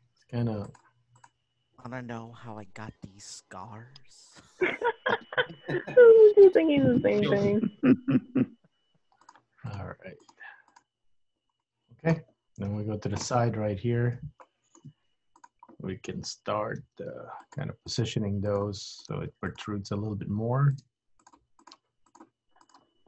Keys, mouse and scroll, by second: 0.0 g, 1.3 click, 2.0 g, 3.1 click, 3.3 g, 4.9 click, 5.1 g, 6.6 click, 6.7 g, 7.6 click, 7.9 g, 9.7 click, 10.0 g, 10.7 click, 11.0 g, 11.7 middle click, 12.7 KP_3, 13.7-14.3 scroll up 3, 14.6 shift+middle click, 15.4 click, 16.9 g, 18.0 click, 18.1 g, 19.1 click, 19.3 g, 20.9 click, 21.0 g, 21.7 click, 21.9 g, 22.7 click, 23.0 g.